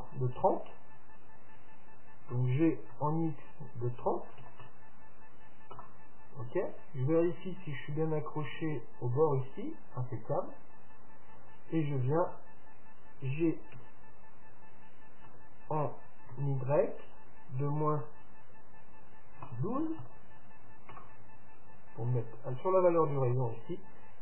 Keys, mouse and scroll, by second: 2.3 g, 7.3-9.1 drag, 9.2 click, 10.7-12.7 middle drag, 13.8 g.